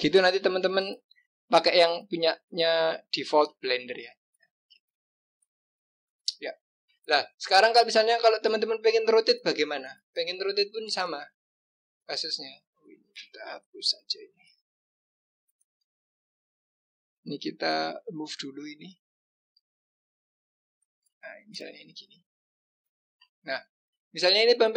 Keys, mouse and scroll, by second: 4.0 click, 5.4 click, 7.1-7.9 scroll down 3, 7.9-8.4 scroll up 2, 8.4-9.0 scroll down 1, 9.0-10.2 scroll up 2, 10.4 click, 11.6-12.4 scroll down 3, 12.4 click, 13.6 Delete, 14.1 click, 14.3 Delete, 14.8-15.5 scroll up 4, 15.6 click, 16.1-17.0 scroll up 1, 17.0-17.9 scroll down 1, 17.9 g, 21.5 click, 22.6 click, 23.4-24.0 scroll down 1, 24.0-24.7 scroll up 1.